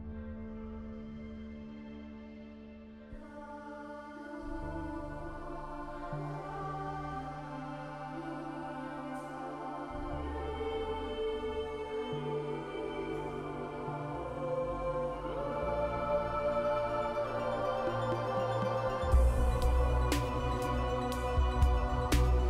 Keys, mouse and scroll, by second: 0.8-1.4 scroll down 4, 2.6-3.0 scroll up 4, 5.1-5.4 scroll down 2, 6.7-7.1 scroll up 3, 7.8-8.3 scroll down 4, 9.4-10.5 scroll up 4, 10.5-11.2 scroll up 1, 13.0-13.4 scroll down 2, 14.3 scroll down 1, 14.3-15.8 scroll up 3, 15.9-16.3 scroll down 3, 17.2 scroll down 1, 17.2-17.8 scroll up 4, 18.6 middle click, 18.7-21.0 scroll down 3, 21.0-22.4 scroll down 2.